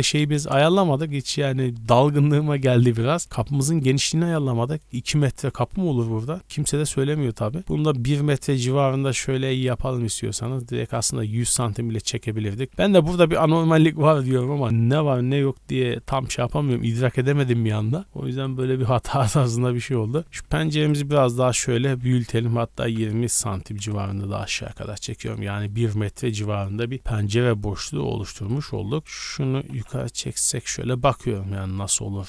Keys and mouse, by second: 0.7 KP_1, 1.0 KP_3, 3.2 g, 5.4 g, 12.2-14.0 typing, 15.3-17.9 drag, 17.1 g, 20.2 z, 20.5 3, 20.7 click, 21.3 g, 24.3 z, 24.4-27.3 middle drag, 27.3-29.0 drag, 29.1-32.2 middle drag, 29.4 g.